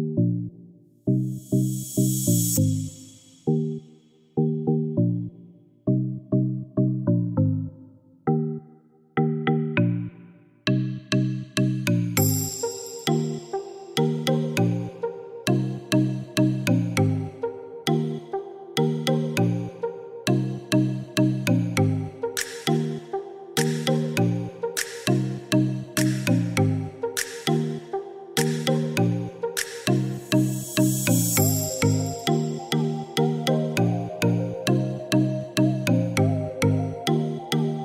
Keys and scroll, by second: 5.1 Escape, 13.0 Escape, 18.4 7, 18.9 3, 21.2 5, 22.2 6, 22.7 Return, 27.2 Escape.